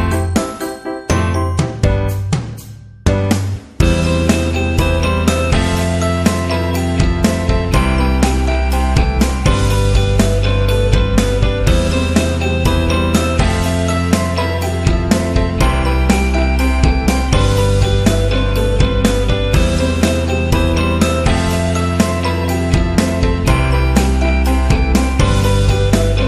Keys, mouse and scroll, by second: 5.6-7.4 drag, 8.3 click, 11.0 click, 18.5 click, 19.6 click, 20.4 click, 21.0 click, 22.6 click, 23.8 Up, 26.1 Up.